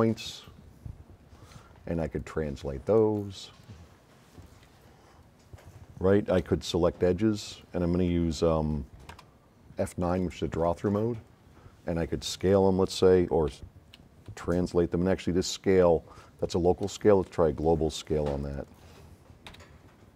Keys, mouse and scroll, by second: 1.7 v, 2.2-3.2 drag, 4.9 middle click, 5.3 middle click, 7.5 click, 9.1 F10, 9.3 F9, 10.2-10.9 drag, 12.3 middle click, 13.6 x, 16.9 click, 17.7-18.9 drag, 19.5 a.